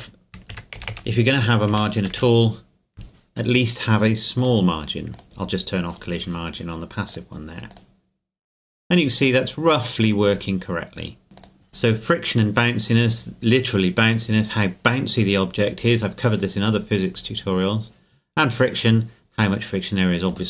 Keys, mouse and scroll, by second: 0.5 KP_Decimal, 0.8 KP_0, 1.7 KP_1, 2.1 KP_Enter, 4.4 click, 5.2 right click, 5.9-9.1 drag, 11.4 click, 17.3-19.1 scroll down 2, 20.3 click.